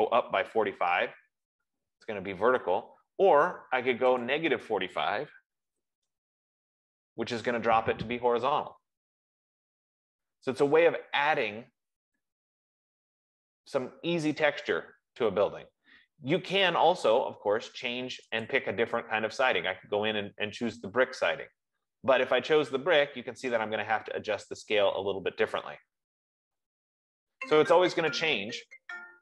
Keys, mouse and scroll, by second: 0.6-1.4 typing, 4.6 click, 5.6-6.6 typing, 6.6-9.5 drag, 18.8-23.8 drag, 24.3 F15.